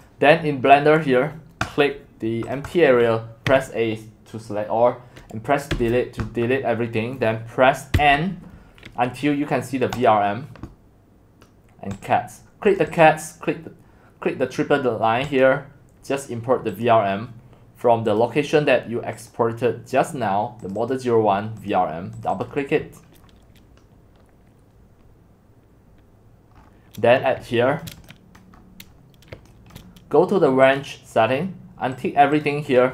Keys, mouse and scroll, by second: 1.6 click, 2.6 click, 2.8 click, 3.5 a, 5.7 Delete, 7.9 n, 10.1-17.4 drag, 20.9 click, 21.5-26.5 drag, 26.5 scroll down 3, 26.7-27.8 scroll up 9, 27.8 shift+middle click, 28.6-30.8 scroll up 5, 28.9 middle click, 30.8-32.9 drag.